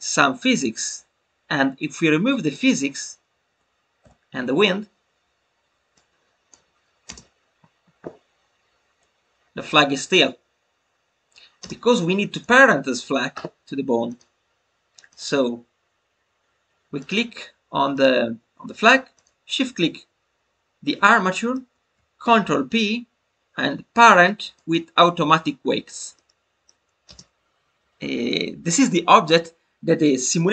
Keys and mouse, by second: 0.4 click, 2.3 click, 4.0 Delete, 12.3 click, 17.8 click, 20.8 middle click, 26.1 middle click.